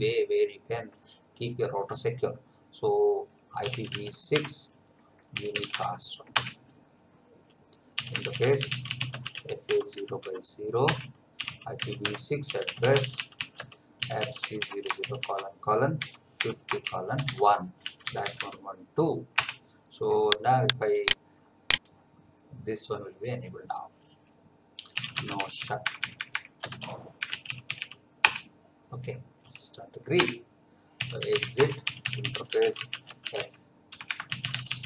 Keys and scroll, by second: 3.4-6.1 typing, 6.3 Return, 7.7-18.9 typing, 10.8 Return, 19.3 Return, 24.7-28.2 typing, 30.1 Return, 30.7-34.8 typing.